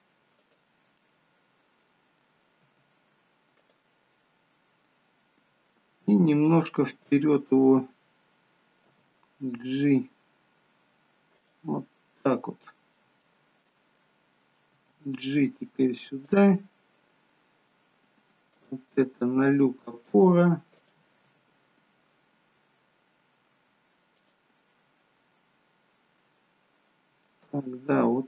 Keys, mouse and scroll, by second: 1.1 middle click, 2.8 g, 4.3 middle click, 7.1 click, 8.9 g, 11.9 middle click, 14.9 middle click, 14.9 g, 16.5 middle click, 18.6 click, 19.0 g, 20.8 click, 21.3 g, 24.6 middle click, 27.4 g.